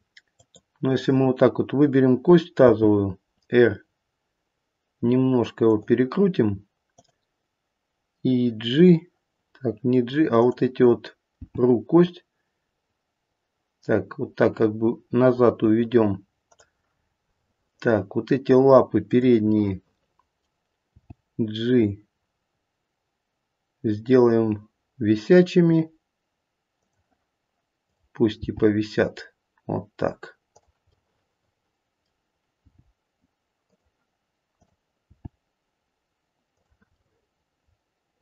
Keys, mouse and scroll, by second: 0.4 click, 2.6 r, 6.9 click, 9.5-10.4 scroll down 2, 10.4 click, 11.3 g, 16.9-17.4 scroll up 4, 17.4 middle click, 17.7 middle click, 19.0 middle click, 19.0 click, 19.6 middle click, 20.9 g, 27.8 click, 28.3 g, 30.9 middle click, 32.5 g, 34.5 click, 35.1 g, 36.9 middle click.